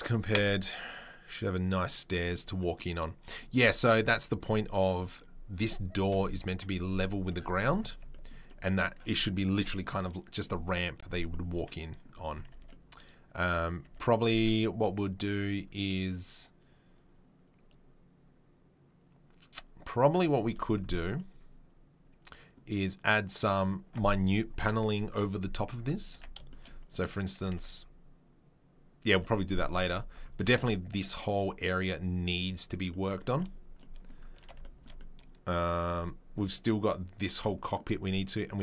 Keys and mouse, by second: 4.4-5.2 right drag, 5.2-38.6 middle drag, 6.1 KP_3, 6.5 KP_1, 12.5 Tab, 13.8 Tab, 20.5 Tab, 26.1 Tab, 27.5 Tab, 29.1 Tab, 30.6 Tab, 33.3 Tab.